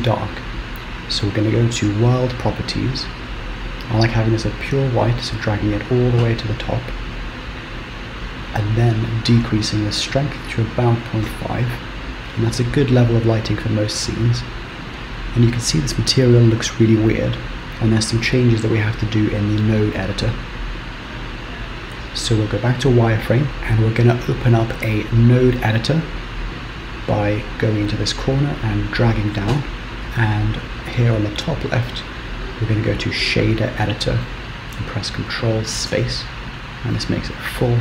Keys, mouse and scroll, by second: 2.1 click, 9.7 click, 21.4 z, 23.5 click, 27.9 click, 31.3 click.